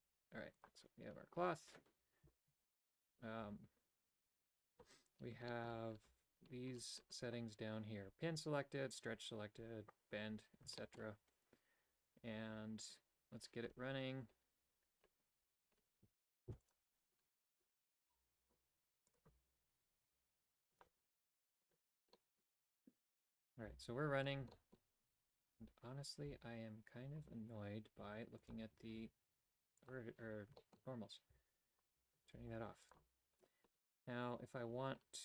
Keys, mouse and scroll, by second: 0.6 click, 5.5 shift+middle click, 10.8 shift+middle click, 16.6 click, 21.7 click, 22.1 middle click, 23.4 right click, 23.7 g, 24.5 shift+middle click, 27.2 typing, 28.4-30.2 drag, 30.6 shift+middle click, 31.3 a, 32.4 g.